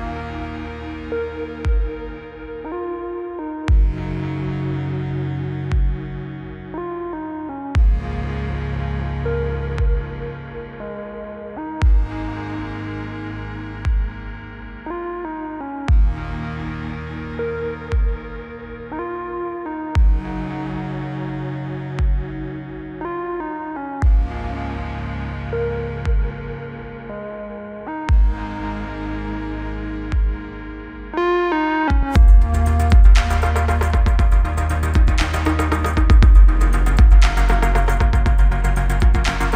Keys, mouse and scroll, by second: 0.8 click, 2.1-3.2 click, 5.7-6.8 typing, 7.6-8.9 click, 10.7 click, 11.8 Return, 12.5 click, 13.4 Return, 14.6 click, 15.6 Return, 17.4-17.7 click, 18.3-19.5 typing, 20.1-21.9 click, 23.4 click, 23.9 Return, 24.6 click, 25.0 Return, 26.1 Return, 27.3-28.0 scroll up 1, 28.4 click, 30.9 scroll down 1, 32.8 click, 35.5 right click, 37.2 click, 38.5 click, 38.7 Return, 39.1-39.5 typing.